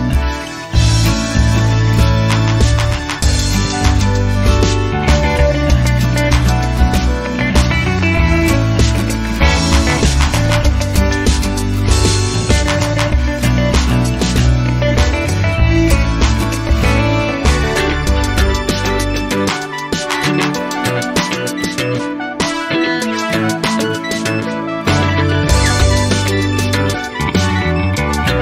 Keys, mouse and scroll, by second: 0.2 click, 1.9 click, 4.6 click, 6.8 ctrl+click, 7.3 ctrl+click, 7.8 ctrl+click, 9.0 ctrl+click, 9.4 ctrl+click, 10.5 ctrl+click, 11.0 ctrl+click, 14.0 click, 15.4 click, 16.3 click, 17.1 space, 17.5 click, 17.9 space, 18.3 click, 18.7 space, 19.1 click, 19.5 space, 20.3 click, 21.2 click, 22.2 space, 23.6-24.2 scroll down 2, 24.2 scroll up 2, 24.8 click, 26.5 click, 28.1 click.